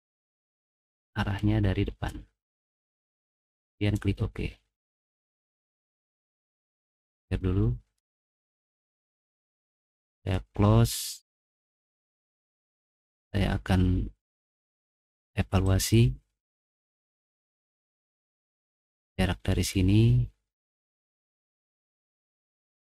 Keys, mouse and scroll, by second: 0.1 click, 1.2 click, 3.7 click, 4.9 middle click, 5.2 middle click, 5.6 middle click, 5.9 middle click, 6.9 click, 7.2 right click, 10.1 click, 12.1 middle click, 12.7 middle click, 15.6 click, 16.6 click, 19.3 middle click, 19.7 middle click, 21.0 middle click, 21.5 click.